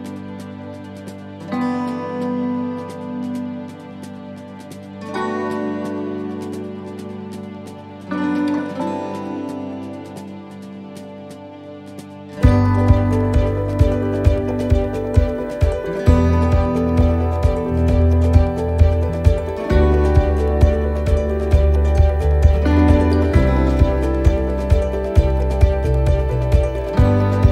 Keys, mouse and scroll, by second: 0.3 middle click, 0.8 shift+middle click, 1.8 shift+d, 4.6 r, 8.5 click, 11.5 click, 12.9 middle click, 14.3 click, 21.0 click, 21.0 middle click, 21.8-22.4 scroll down 2, 22.4 shift+middle click, 24.1 click.